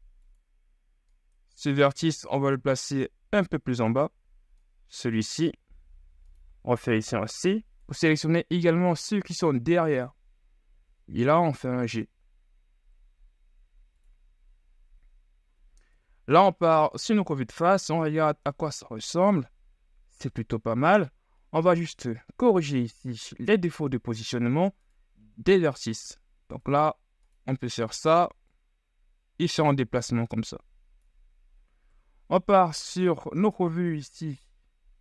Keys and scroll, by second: 5.5 ctrl+z, 6.6 c, 10.9 g, 16.2 KP_1, 16.7 z, 18.4 shift+Tab, 22.8 Tab, 32.1 KP_3, 32.7 z.